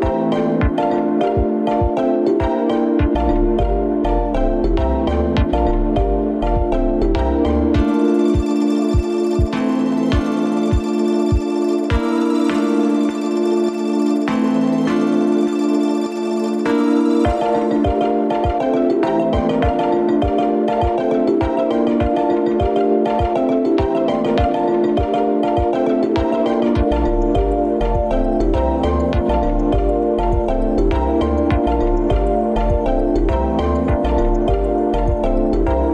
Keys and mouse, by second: 1.1 ctrl+z, 1.3 ctrl+z, 3.3 ctrl+shift+z, 4.3 ctrl+z, 4.5 ctrl+z, 5.7 ctrl+z, 7.7 ctrl+shift+z, 8.1 ctrl+shift+z, 9.0 Tab, 9.8 Tab, 10.3 alt+z, 12.1 alt+z, 13.7 shift+a, 26.9-27.7 shift+middle drag, 33.4-35.9 drag.